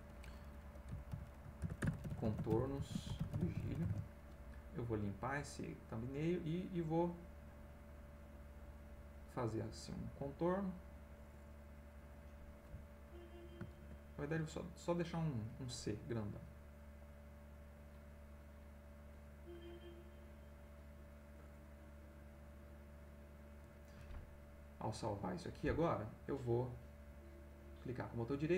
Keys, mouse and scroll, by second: 1.1-4.4 typing, 5.1 click, 6.1-11.7 drag, 13.8 ctrl+x, 17.0 click, 17.5-23.7 drag, 24.9 click, 26.9 right click, 27.6-28.5 right drag.